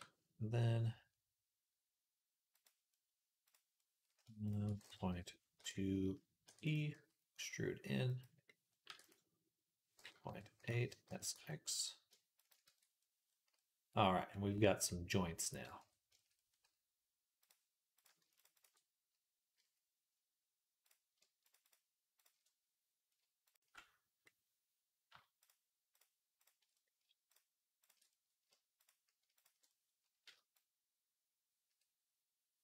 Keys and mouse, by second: 2.4-3.4 drag, 2.4-3.4 middle drag, 6.3 click, 6.3 e, 6.5-17.3 middle drag, 6.8 s, 8.7 e, 10.9 s, 12.5 Tab, 15.6 Tab, 17.3 click, 17.9 shift+middle click, 18.4 alt+shift+click, 18.5-21.5 alt+shift+middle drag, 19.4 a, 21.5 alt+shift+click, 21.5-27.1 alt+shift+middle drag, 25.7 alt+shift+click, 27.1 alt+shift+click, 27.2 alt+shift+middle click, 27.6 alt+shift+click, 27.7 alt+shift+middle click, 28.6 alt+shift+click, 28.7-30.4 alt+shift+middle drag, 30.4-32.6 shift+drag.